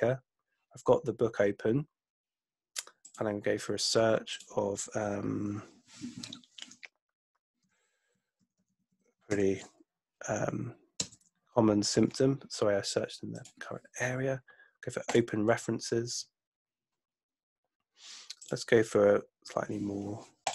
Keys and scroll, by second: 7.4-9.8 typing, 11.0 Return.